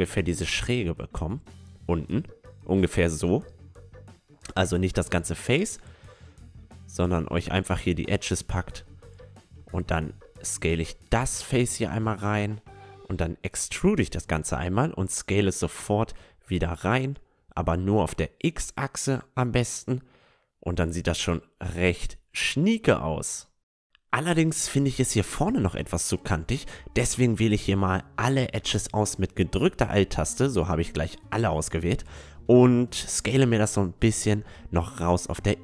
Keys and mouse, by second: 2.1 Tab, 2.6-4.7 middle drag, 4.7 Tab, 5.3 a, 5.6-9.5 middle drag, 7.9-10.1 drag, 8.3-10.1 right drag, 8.8 s, 12.3-14.3 middle drag, 13.5 e, 14.3 s, 16.3 middle click, 16.8 s, 19.5 Tab, 20.8 middle click, 22.4-24.0 middle drag, 23.2 Tab, 24.0 a, 25.5-27.5 right drag, 27.3-29.2 drag, 28.2-32.7 right drag, 28.4-31.5 middle drag, 29.5 a, 30.2 s, 33.7 Tab, 33.9-35.1 middle drag, 35.1 Tab.